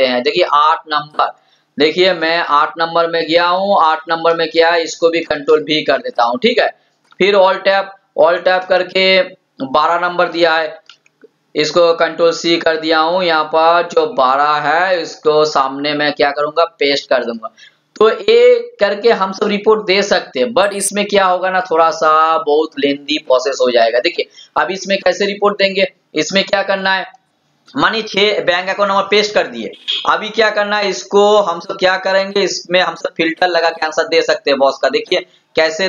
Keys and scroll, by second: 5.5 ctrl+v, 7.1 alt+Tab, 11.1 ctrl+c, 11.6 alt+Tab, 17.2 ctrl+v.